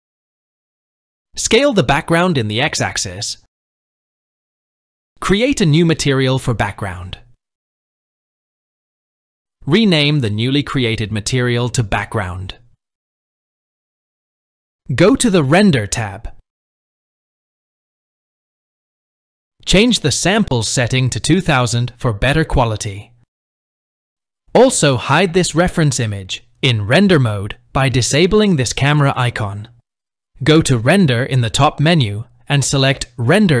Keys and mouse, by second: 1.5 click, 1.5 s, 3.2 s, 5.9 click, 8.3 click, 9.8 click, 10.1-14.2 drag, 16.0 click, 17.8-18.8 drag, 20.6-22.0 drag, 24.6 click, 28.0 click, 31.8-33.6 drag.